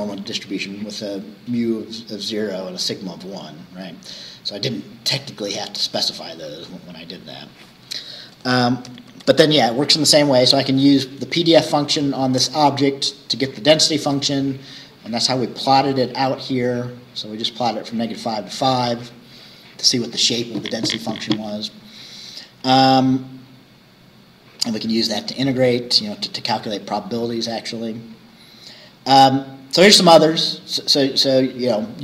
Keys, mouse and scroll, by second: 7.5 click, 9.2 shift+3, 17.4 scroll down 1, 18.8 scroll up 1, 22.3-22.6 scroll up 1, 23.5 scroll down 2, 27.2-27.6 scroll down 2, 28.1 scroll down 2, 29.7-30.0 scroll down 2.